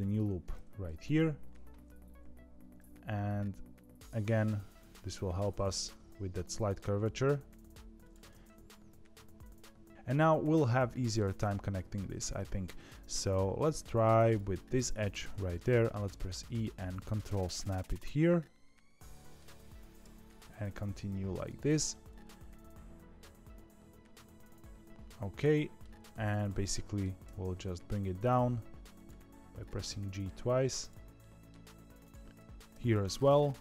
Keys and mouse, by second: 0.8 KP_1, 1.3 KP_3, 2.7 g, 8.2-9.9 middle drag, 10.6 middle click, 13.7 2, 14.2 click, 15.5 middle click, 16.0 e, 17.8-19.3 middle drag, 20.0 e, 21.8-25.7 middle drag, 26.6 middle click, 27.2 g, 29.5 click, 29.8 middle click, 31.1 middle click, 32.0 click, 32.3 g, 32.7 g.